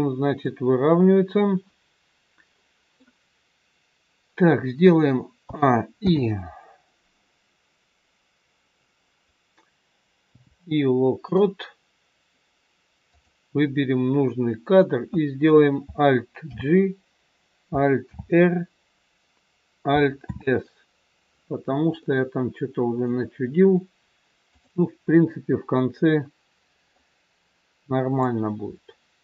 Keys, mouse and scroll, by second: 2.1 scroll up 1, 2.5 middle click, 5.3 a, 5.9 i, 13.1 click, 16.4 alt+g, 18.0 alt+r, 20.2 alt+s, 22.0 middle click, 24.5 click, 25.7 middle click, 28.2 click.